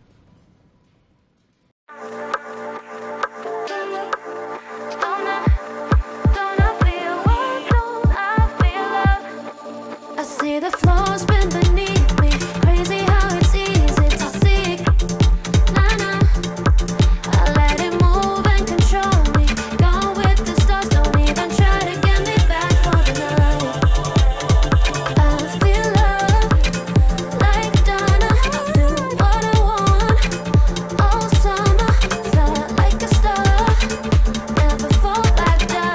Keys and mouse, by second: 1.3 g, 2.6 click, 2.8 g, 4.4 click, 4.9 click, 5.2 g, 6.8 click, 6.9 g, 8.1 click, 8.7 g, 10.2 click, 10.3 g, 11.7 click, 11.9 g, 13.0 click, 13.1 g, 14.5 click, 14.7 g, 16.1 click, 16.3 g, 17.2 click, 17.3 g, 18.4 click, 18.5 g, 21.0 click, 21.1 g, 22.2 g, 23.0 click, 23.1 g, 24.2 click, 24.4 g, 26.1 k, 32.4 middle click, 33.4 shift+click, 35.3 click.